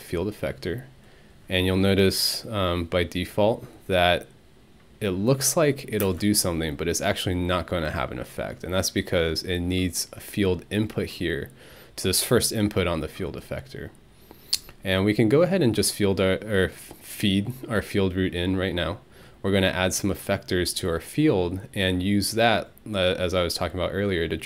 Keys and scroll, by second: 6.0 space.